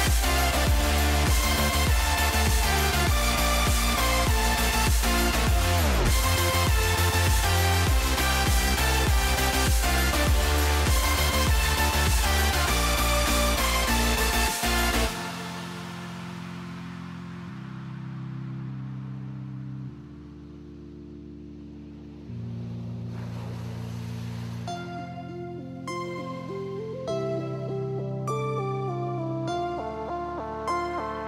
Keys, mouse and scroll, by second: 1.7 middle click, 2.0 middle click, 2.6 middle click, 4.0 middle click, 10.0 click, 10.8 middle click, 11.2 middle click, 11.5 middle click, 12.0 middle click, 14.0 middle click, 14.5 middle click, 15.0 middle click, 15.6 shift+click, 16.5 shift+middle click, 17.3-18.5 shift+drag, 22.8 click, 23.2 click, 24.3 Tab, 25.3 click, 26.9 g, 28.2 alt+click, 29.5 middle click, 30.2 click.